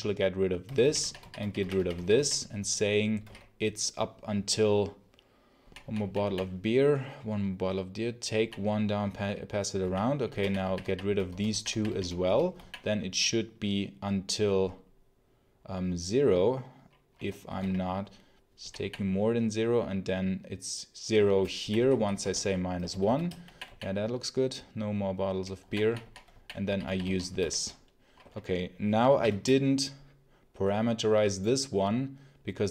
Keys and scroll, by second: 0.3-1.5 typing, 2.8-3.6 typing, 5.5 j, 5.9 j, 8.3 j, 9.5-13.0 typing, 17.1-18.5 typing, 21.1-23.4 typing, 24.4 w, 25.5 j, 26.2 j, 26.5 k, 27.3 ctrl+alt+l, 29.1 shift+F10.